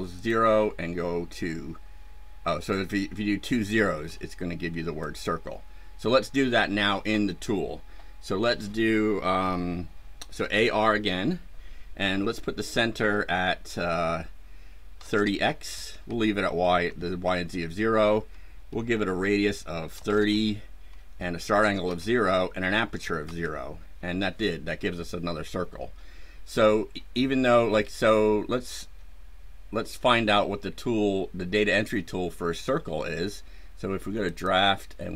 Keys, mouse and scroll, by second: 0.1 click, 3.4 click, 5.0 click, 10.3 a, 10.6 r, 14.9 KP_3, 15.0 KP_0, 15.6 KP_Enter, 16.7 KP_Enter, 19.9 KP_3, 20.0 KP_0, 20.2 KP_Enter, 21.5 KP_0, 21.8 KP_Enter, 22.8 KP_0, 23.2 KP_Enter, 34.2 click.